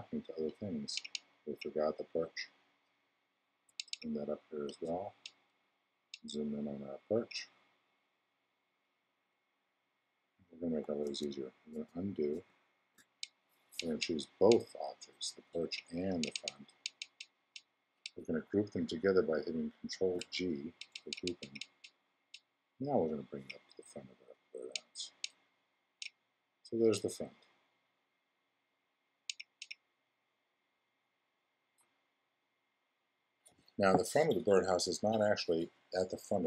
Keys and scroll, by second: 11.0 super+z, 19.9 super+g.